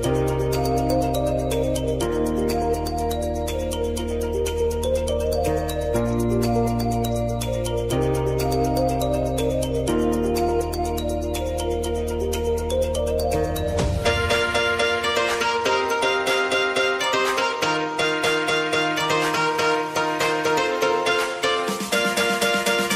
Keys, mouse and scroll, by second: 6.4 click, 8.2 Return, 8.9 click, 11.2 scroll down 1, 12.1 click, 12.9 Return, 13.4 space, 15.2 click, 15.9-16.7 typing, 19.4-22.9 drag.